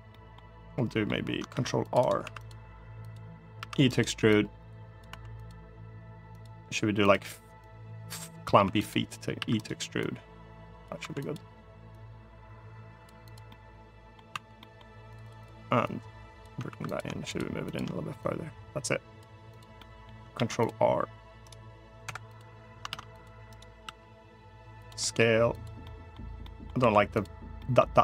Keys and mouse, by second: 0.6 middle click, 1.2 ctrl+r, 1.7 right click, 1.9 3, 2.1 click, 2.8 click, 3.3 e, 3.6 right click, 4.1 click, 4.8 2, 5.1 click, 6.0 click, 6.7 click, 7.4 click, 8.3 3, 8.6 click, 9.1 e, 9.3 right click, 9.8 click, 10.7 2, 11.0 click, 11.6-12.8 drag, 13.2 middle click, 14.0 2, 14.3 middle click, 14.9 click, 15.6 click, 16.4 3, 17.0 shift+click, 17.4 shift+click, 18.0 click, 19.5 middle click, 20.0 ctrl+r, 21.2 right click, 21.7 Escape, 22.6 ctrl+r, 23.2 right click, 23.5 s, 24.5 click, 24.7 middle click, 25.2 click, 25.5 middle click, 26.1 middle click, 26.5 1, 26.8 click, 27.3 middle click.